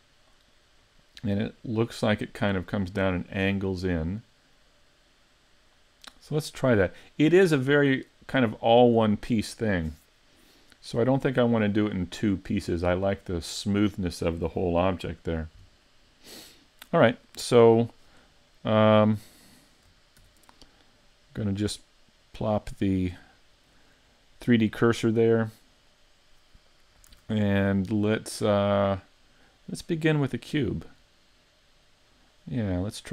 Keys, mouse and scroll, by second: 17.6 shift+middle click, 19.1-20.2 scroll down 3, 20.2 shift+c, 22.3 click, 22.7-23.2 scroll up 4, 23.2 shift+middle click, 27.1 shift+a, 32.7-33.1 scroll down 3.